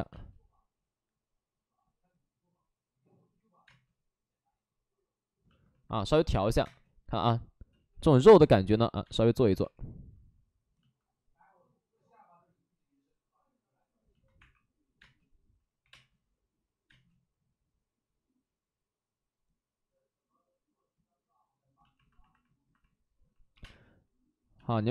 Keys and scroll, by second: 3.6 space, 6.5 1, 6.5 space, 7.7 space, 7.9 ctrl+z, 9.0-9.8 typing, 13.7-15.7 typing, 16.8 space, 23.4 5, 23.5 space, 24.5 space.